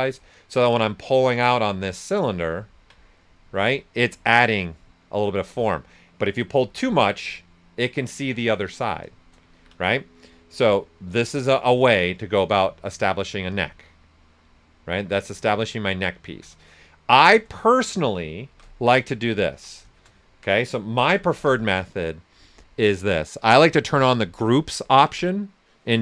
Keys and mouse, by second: 0.5-2.7 drag, 2.7 ctrl+right click, 3.9-9.5 right drag, 9.5 ctrl+z, 10.5 click, 11.6 right click, 13.1 right click, 16.2 ctrl+z, 16.7 right click, 18.5 shift+f, 18.7 right click, 20.8-21.8 typing, 23.9 click.